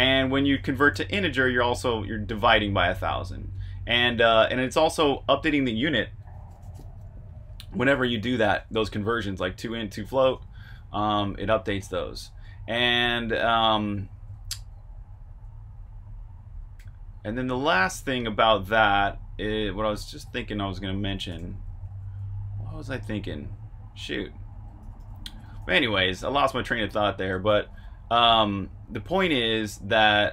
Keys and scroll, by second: 0.2-1.0 typing, 4.9 Escape, 8.1-16.0 typing, 17.0-22.9 typing, 24.5-30.3 typing.